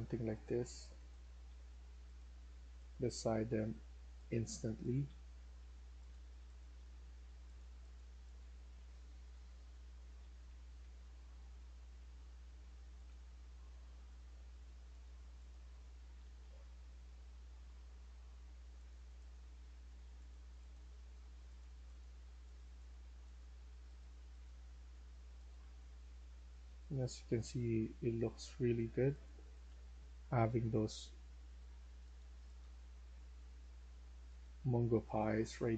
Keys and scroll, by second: 0.7-1.6 typing, 2.7-3.4 typing, 4.5-6.6 typing, 8.1-13.4 typing, 16.0-19.3 typing, 22.7-25.7 typing, 27.0-30.6 typing, 32.3-33.1 typing, 35.0-35.7 typing.